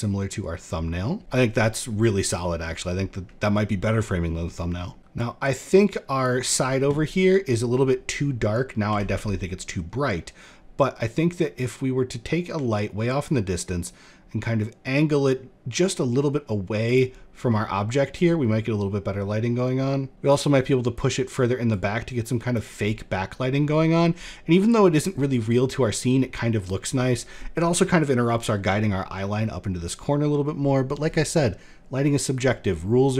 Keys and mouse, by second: 4.4 middle drag, 5.0 click, 7.3 middle click, 8.4 r, 17.3 drag, 18.6 drag, 19.9 click, 21.4 click.